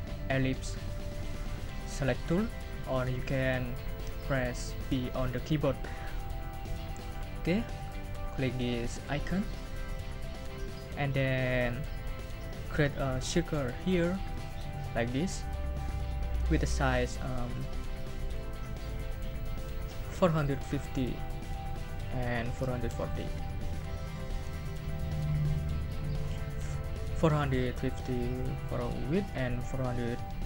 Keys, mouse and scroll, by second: 9.9 click, 14.3-17.0 drag, 18.0 click, 20.0-23.6 typing, 22.2 Tab.